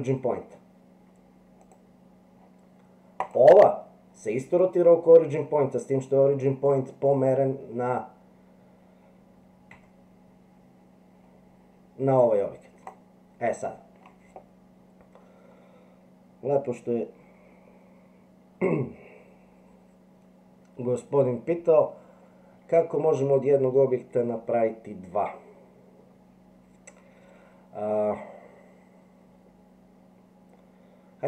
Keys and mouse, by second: 9.7 r.